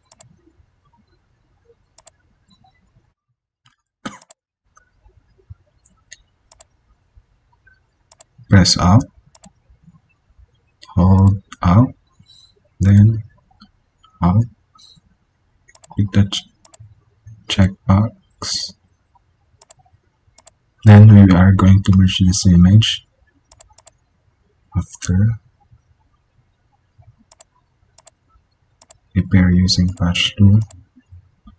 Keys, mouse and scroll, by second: 22.1 ctrl+e.